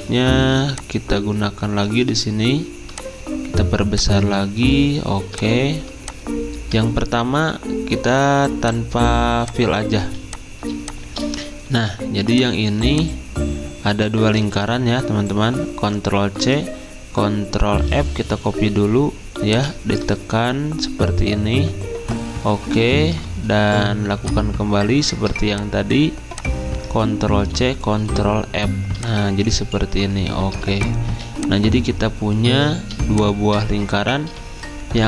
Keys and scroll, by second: 11.8 v, 16.3 ctrl+c, 17.7 ctrl+f, 27.3 ctrl+c, 27.9 ctrl+f, 31.1 z.